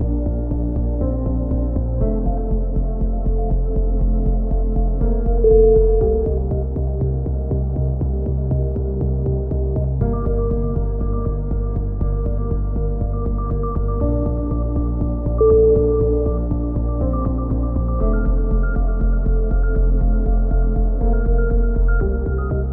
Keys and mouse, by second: 1.1 click, 1.4 right click, 1.8 KP_7, 2.0 click, 2.1 z, 3.5 alt+m, 3.8 a, 4.0 right click, 4.3 click, 6.9 ctrl+z, 7.6 a, 8.2 k, 9.8 a, 9.9 z, 10.0 middle click, 11.0 KP_3, 11.2 Tab, 11.2 z, 11.6 click, 11.9 Tab, 12.1 z, 13.3 ctrl+r, 13.3 z, 13.7 z, 14.0 click, 14.0 right click, 14.6 a, 15.9 click, 16.7 KP_3, 17.5 click, 17.6 right click, 18.0 e, 20.7 click, 21.5 g, 22.5 right click.